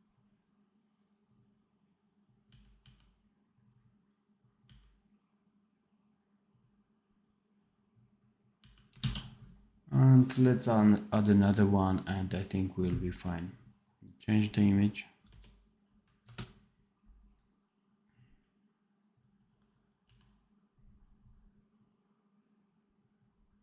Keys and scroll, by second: 2.4 d, 8.5 d, 9.0 ctrl+s, 19.9 v.